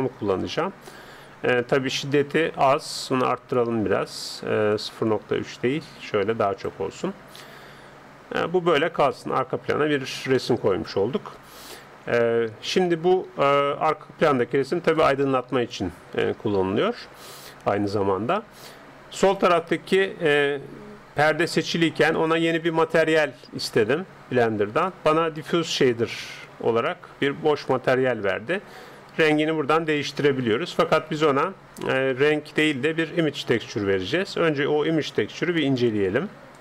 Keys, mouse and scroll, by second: 1.7 middle click, 2.1-4.7 scroll down 1, 4.7-6.7 drag, 9.1-13.4 middle drag, 14.9-16.9 drag, 16.3-19.2 middle drag, 19.2-21.2 right drag, 22.1-23.9 drag, 23.7-25.1 middle drag, 24.9-26.5 drag, 25.7 middle click, 26.1 right click, 26.7 middle click, 27.6-29.3 drag, 27.6 right click, 35.5 ctrl+s.